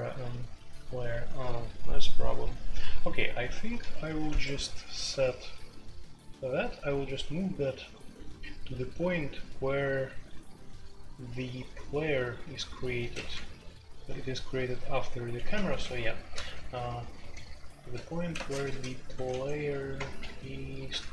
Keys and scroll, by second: 0.0-21.1 typing, 4.2 Escape, 13.1 ctrl+d, 13.3 ctrl+d, 15.5 ctrl+u, 15.7 ctrl+u.